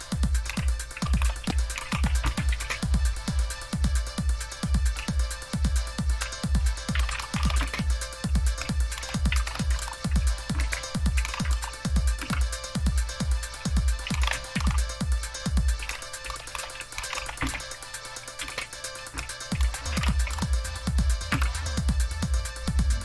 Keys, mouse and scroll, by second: 0.0-2.7 typing, 5.0 BackSpace, 5.4 BackSpace, 5.5 BackSpace, 6.7-11.2 typing, 11.4 Tab, 12.1 Return, 13.8-21.8 typing.